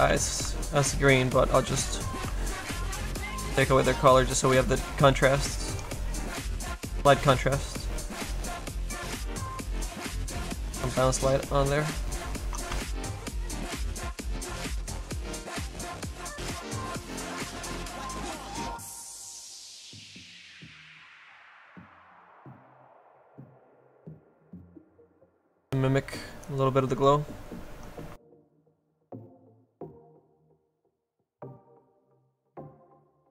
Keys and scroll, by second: 0.2 s, 12.8 z.